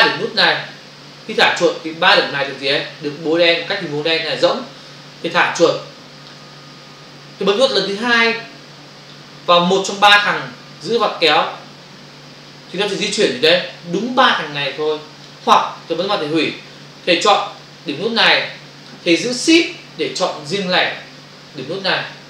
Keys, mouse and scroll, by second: 11.3 click, 16.0 click, 17.6 click, 22.0 shift+click.